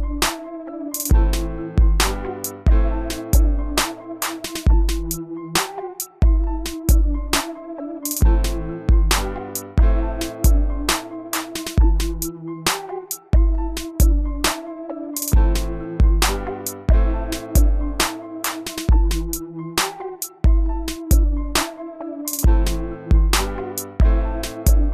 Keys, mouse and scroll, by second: 0.0-1.5 typing, 3.4 click, 11.8 r, 13.4-24.9 drag.